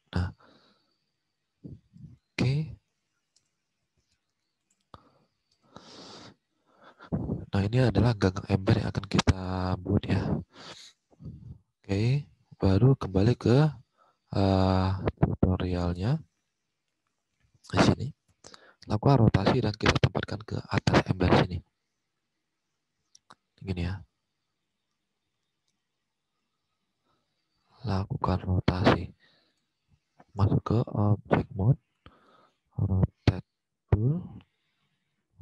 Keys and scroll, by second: 0.9 alt+Tab, 2.6 alt+Left, 3.3 space, 5.4 space, 7.1 alt+Tab, 8.7 alt+Tab, 15.1 alt+Tab, 16.9 alt+Tab, 25.2 alt+Tab, 26.6 alt+Tab.